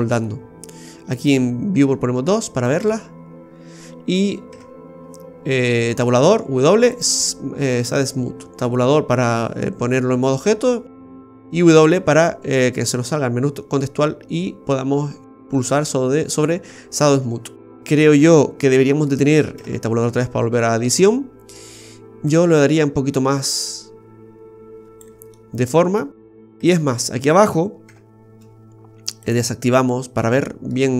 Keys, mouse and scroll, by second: 1.1 click, 2.3 scroll up 1, 2.6 middle click, 4.5 Tab, 6.2 w, 11.9 w, 19.5 Tab, 20.5-20.8 scroll up 2, 20.9 middle click, 21.5 middle click, 22.3 click, 25.3 middle click, 26.5 Tab, 29.2 click, 29.8 scroll down 1, 30.2 middle click.